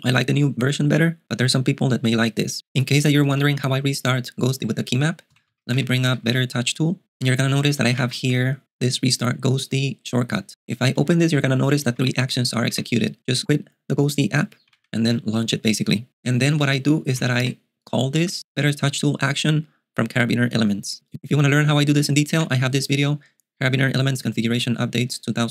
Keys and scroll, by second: 3.3 ctrl+alt+shift+super+g, 5.1-6.7 typing, 8.0 Down, 11.1 Right, 12.0 Down, 12.7 Down, 14.7 Down, 16.8-17.9 typing, 22.4 Return.